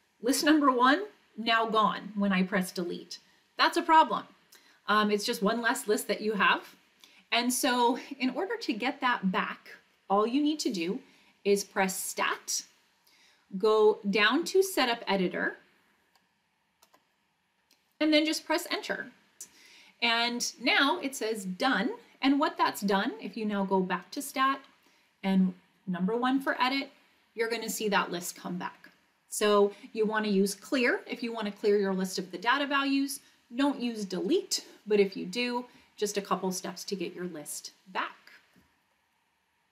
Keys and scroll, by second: 14.2 Down, 14.5 Down, 15.0 Down, 15.4 Down, 16.8 Return, 19.4 Return, 26.4 Return.